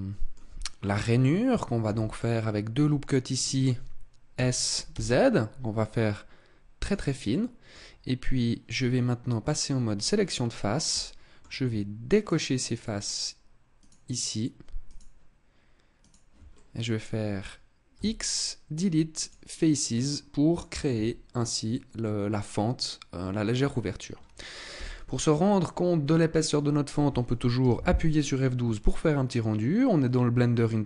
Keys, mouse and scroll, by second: 1.7 ctrl+r, 3.2 click, 4.2 s, 6.8 click, 7.2 middle click, 9.8 click, 10.8 middle click, 12.0 shift+right click, 12.8 shift+right click, 13.7 shift+right click, 14.7 shift+right click, 15.9 shift+right click, 16.4 middle click, 17.8 x, 19.8 middle click, 20.8 Tab, 21.5 scroll down 2, 21.9 middle click, 23.0 scroll down 2, 23.5 scroll up 3, 24.6 KP_0.